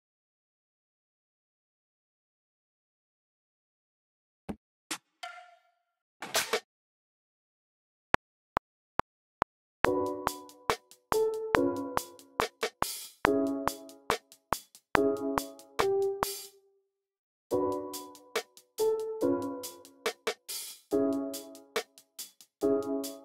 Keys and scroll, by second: 4.4 r, 5.8 r, 6.1 r, 7.2 v, 8.0 r, 8.2 super+k, 10.6 a, 11.1 a, 12.3 a, 14.0 a, 15.7 a, 16.2 space, 16.6 super+k, 17.0 super+a, 17.6-18.4 typing, 18.1 super+r, 20.3 v, 21.2 x.